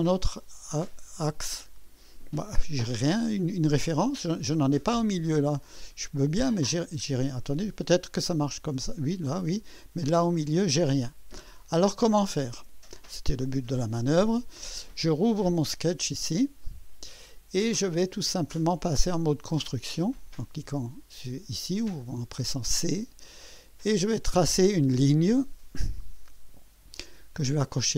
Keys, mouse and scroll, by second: 5.7 click, 12.3 click, 15.2 click, 16.2 scroll up 1, 16.6 right click, 17.9-18.5 right drag, 21.9 click, 24.6 click, 26.9 click.